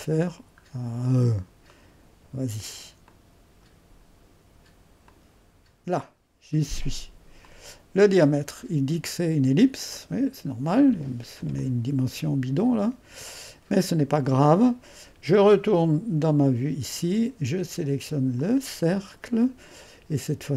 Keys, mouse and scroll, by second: 0.7-2.8 scroll up 1, 3.1-6.2 drag, 7.4-8.6 drag, 9.9-20.5 drag.